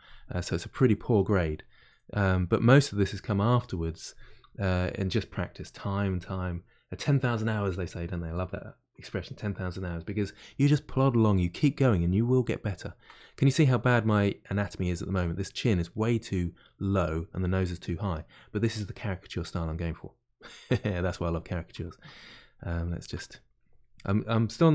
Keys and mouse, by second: 1.1-2.5 drag, 2.5-22.3 middle drag, 22.3-24.7 ctrl+drag.